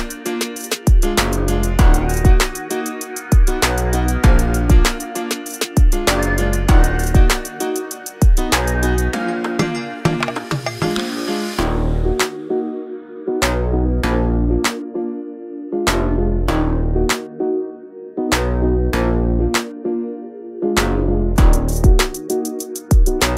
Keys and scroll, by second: 0.0-0.5 typing, 3.5 m, 4.8 Right, 5.1 Left, 6.0 space, 6.4 Escape, 11.2 r, 14.0 space, 14.9 m, 19.6 Right.